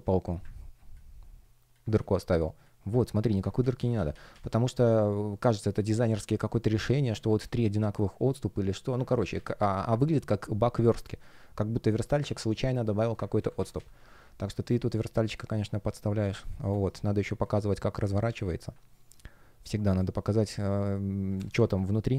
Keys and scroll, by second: 0.0 shift+Return, 1.9 space, 3.5 super+z, 9.0 super+z, 13.3 super+z, 14.4 space, 16.7 shift+p, 18.2 super+z, 19.9 space.